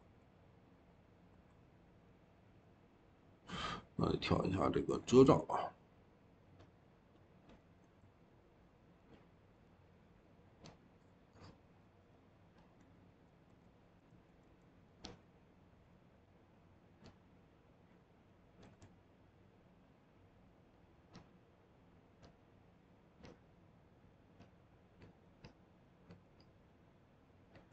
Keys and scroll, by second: 13.9 l, 14.3 e, 19.4 typing.